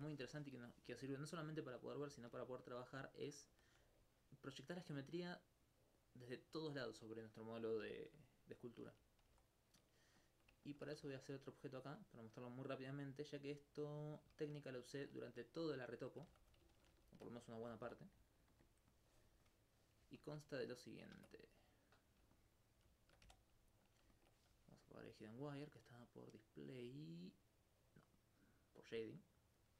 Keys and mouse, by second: 10.2 click, 11.0 shift+a, 11.7-13.5 drag, 14.5 alt+click, 14.6 alt+click, 18.9 click, 19.2 right click, 20.2 alt+click, 20.7 right click, 21.2 ctrl+Tab, 21.6 click, 21.9 right click, 22.3 alt+click, 23.1 shift+right click, 23.9 click, 25.6 middle click, 29.6 click.